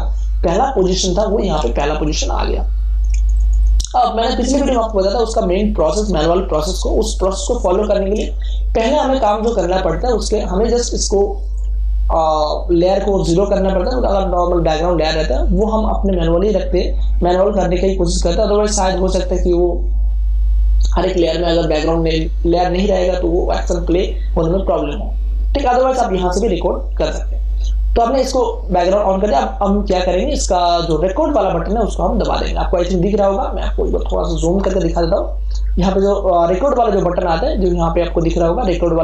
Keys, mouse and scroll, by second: 1.6 space, 2.0-6.2 ctrl+drag, 8.2 space, 8.5 ctrl+click, 13.7 click, 30.5 click, 30.6-34.5 drag, 34.5 super+=.